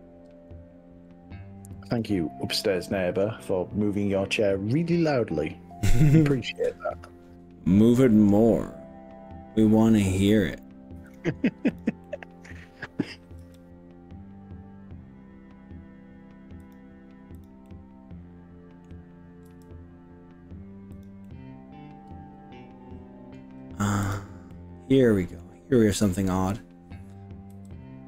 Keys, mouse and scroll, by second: 1.0 scroll down 1, 1.9 click, 2.6 middle click, 2.9-4.3 middle drag, 4.5-10.1 middle drag, 10.3 middle click, 11.1 click, 11.7 click, 12.0 middle click, 13.4 g, 16.7 click, 17.5 click, 17.7-18.9 middle drag, 19.5 g, 21.0 click, 21.2-23.4 middle drag, 24.0 click, 24.5 middle click, 25.2 click, 27.5 g.